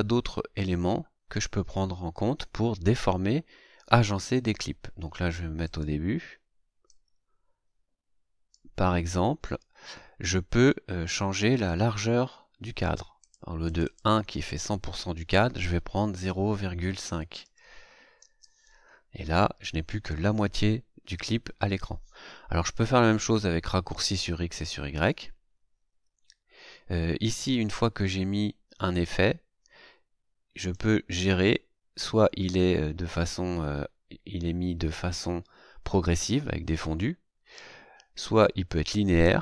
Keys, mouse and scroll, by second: 5.6 click, 6.8-8.7 drag, 13.2 click, 13.7 click, 14.6 click, 16.2 KP_0, 17.2 ,, 17.4 KP_5, 18.2 KP_Enter, 30.5 right click.